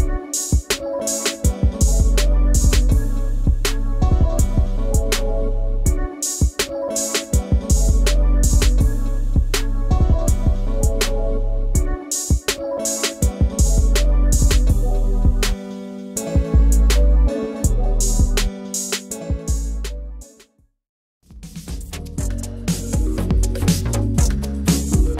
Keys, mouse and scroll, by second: 3.0-4.3 drag, 4.3-5.4 middle drag, 5.4-7.0 drag, 7.0 s, 11.4-13.8 middle drag, 13.8-18.5 drag, 18.5 s, 19.8 middle click, 20.3 Tab, 20.5 click, 20.8-22.5 middle drag, 22.5 click, 22.9 Tab, 24.1 click, 24.8-25.1 middle drag.